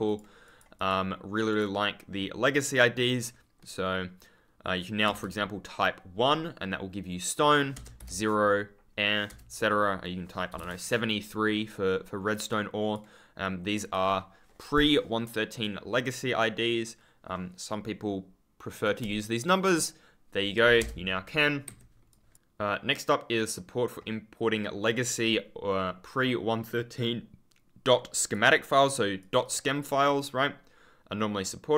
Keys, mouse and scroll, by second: 0.0 click, 7.7 BackSpace, 7.9 0, 9.2 BackSpace, 10.5 3, 12.4 click, 20.7 BackSpace, 21.6 Escape, 22.0 click, 22.8 click, 24.8 click, 28.1 click.